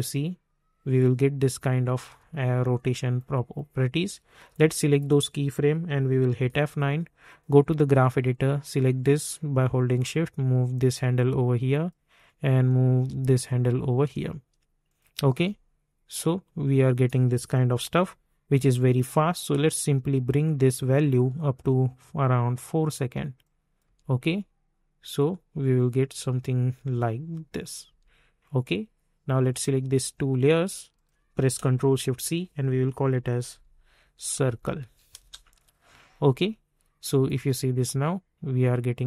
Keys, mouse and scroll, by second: 1.6 space, 3.1-6.4 drag, 6.4 F9, 7.4-11.5 drag, 11.5-14.8 drag, 14.8 click, 15.3 space, 17.5 typing, 18.7-23.8 drag, 23.8 space, 27.8 space, 28.6 click, 30.4 click, 31.7 ctrl+shift+c, 32.9-35.3 typing, 37.0 click, 37.3 space.